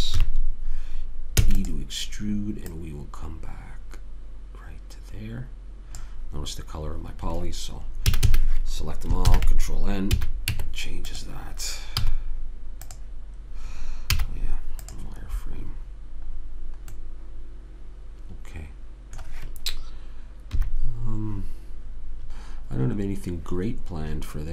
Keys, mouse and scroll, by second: 0.5 KP_3, 1.7 e, 3.0-4.0 drag, 8.5 a, 8.7 a, 9.6 ctrl+n, 10.5 a, 10.9 Tab, 12.4 z, 14.5 z, 15.6-17.5 middle drag, 20.9 KP_3.